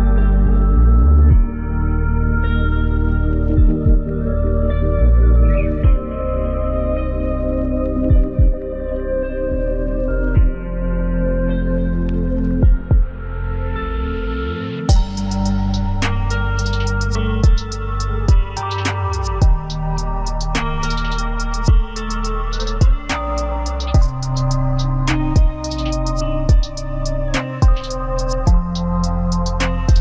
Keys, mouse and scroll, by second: 3.6 right click, 6.4 double click, 8.4 typing, 10.5 Escape, 17.8 shift+right click, 20.1 ctrl+r, 21.2 scroll up 1, 24.4 scroll.